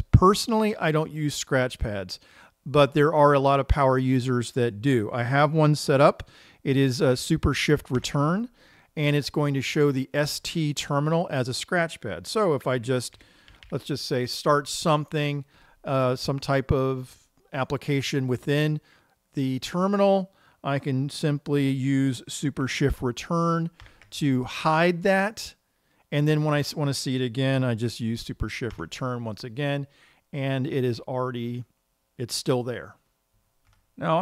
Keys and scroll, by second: 8.5 shift+super+Return, 13.3-14.8 typing, 15.8 typing, 24.2 shift+super+Return, 29.2 shift+super+Return.